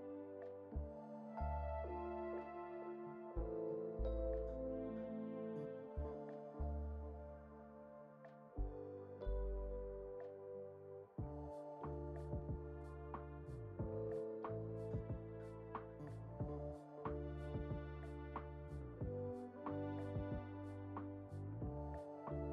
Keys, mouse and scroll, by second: 2.3 alt+d, 6.0 click, 6.4-7.1 scroll down 4, 7.1-9.2 shift+middle drag, 7.1 scroll down 1, 9.2-10.0 scroll up 1, 10.5 click, 10.5 scroll up 2, 11.2-15.4 middle drag, 15.4 click, 15.7-16.5 shift+middle drag, 16.5-17.2 scroll up 2, 17.6 click, 19.6 shift+d.